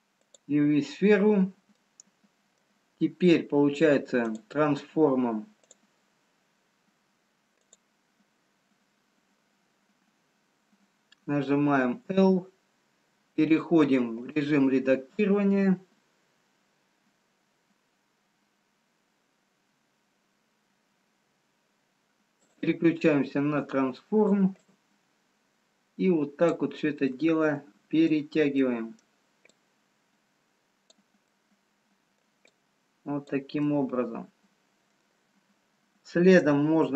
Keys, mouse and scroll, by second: 1.9 middle click, 4.5 click, 5.6 click, 7.0-7.3 scroll down 1, 7.7 click, 13.6 click, 13.6 l, 22.6 click, 22.6 l, 23.5 click, 25.5 click, 27.1 middle click, 28.6 middle click, 29.4 click, 31.3 middle click, 33.2 click, 33.7 middle click.